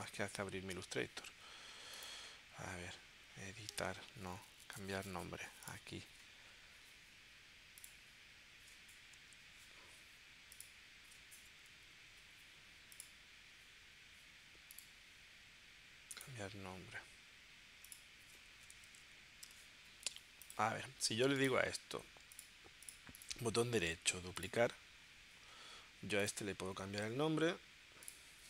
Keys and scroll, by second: 0.0 super+Tab, 9.1 Right, 11.5 Right, 12.2 Right, 18.4-20.4 typing.